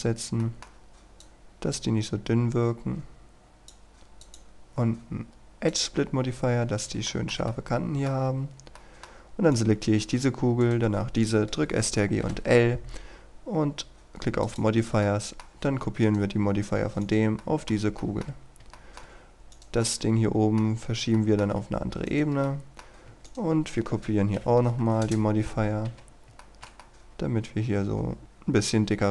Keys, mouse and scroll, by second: 0.4 middle click, 1.2-4.2 drag, 7.1-8.6 shift+middle drag, 9.2-9.6 scroll down 1, 9.6 right click, 10.6 shift+right click, 12.2 ctrl+i, 14.5 click, 15.1 middle click, 16.0 right click, 17.4 middle click, 18.0 shift+middle click, 18.4 scroll down 1, 18.8 shift+middle click, 19.6 right click, 19.9 middle click, 20.8 scroll down 1, 21.2 shift+middle click, 21.6-22.1 scroll up 1, 22.1 right click, 22.5 middle click, 23.3 shift+right click, 24.4 ctrl+i, 25.0 Return, 25.9 typing, 26.0 scroll down 1, 26.4-29.1 shift+middle drag.